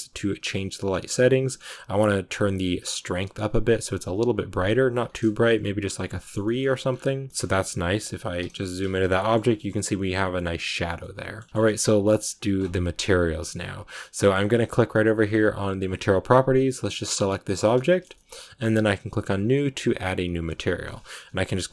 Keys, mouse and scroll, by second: 2.2-5.8 drag, 6.1 shift+middle click, 6.5 scroll up 1, 7.3 shift+middle click, 7.6 right click, 8.4 KP_Decimal, 8.8 a, 9.0 middle click, 9.2 scroll up 1, 10.6 scroll up 1, 10.7 scroll down 1, 10.9 middle click, 11.3 scroll up 2, 11.5-16.8 middle drag, 16.8 right click, 17.7-19.5 shift+middle drag, 19.5-21.7 drag.